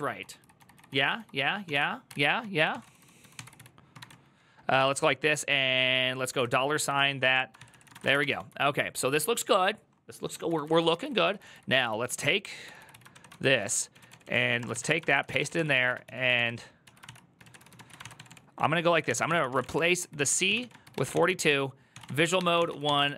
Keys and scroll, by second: 0.0-8.6 typing, 7.1 Return, 7.3 ctrl+c, 7.5 ctrl+c, 10.2-23.1 typing, 16.8 ctrl+c.